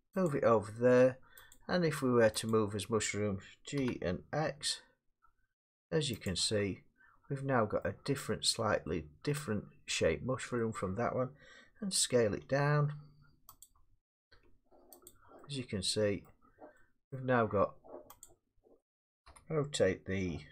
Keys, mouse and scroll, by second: 0.3 click, 1.5 click, 2.5 click, 3.8 g, 4.5 x, 6.3 click, 6.6 middle click, 7.8 middle click, 9.4 middle click, 10.6 middle click, 12.4 s, 13.6 click, 14.3 g, 15.1 click, 16.2 middle click, 17.1 middle click, 18.2 click, 19.3 r.